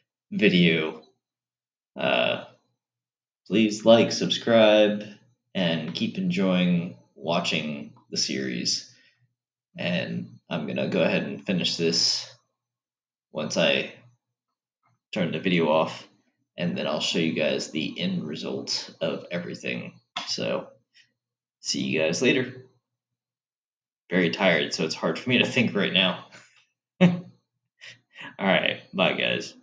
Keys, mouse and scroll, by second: 6.5-9.5 middle drag.